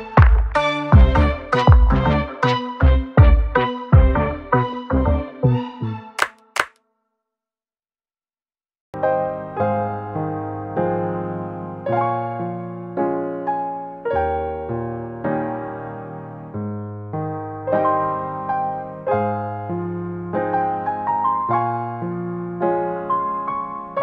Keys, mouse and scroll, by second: 0.7 click, 1.1 click, 1.7 click, 2.4 click, 3.2 click, 4.2 click, 7.3 click, 10.0 click, 11.8 click, 12.3 ctrl+shift+t, 15.4 click, 20.3 click.